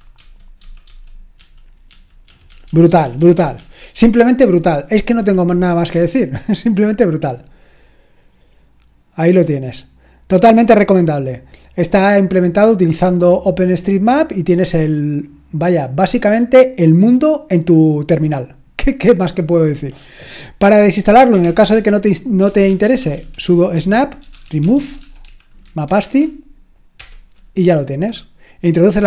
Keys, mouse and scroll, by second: 0.0-3.6 typing, 5.9 q, 21.1-27.4 typing.